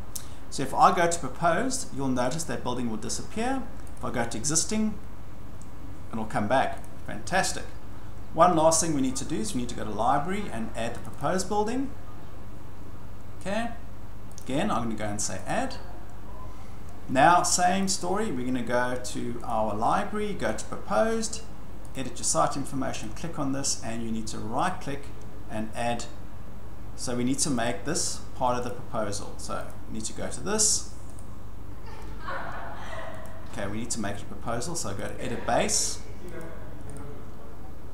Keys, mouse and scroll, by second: 1.0 click, 4.0 click, 6.8 click, 9.1 click, 11.0 click, 11.2 click, 14.4 click, 15.5 click, 17.9 click, 19.5 click, 20.6 click, 21.9 click, 23.0 click, 24.7 right click, 27.6 click, 28.7 click, 29.7 click, 31.2 right click, 33.2 click, 35.1 right click, 36.4 click, 36.9 right click.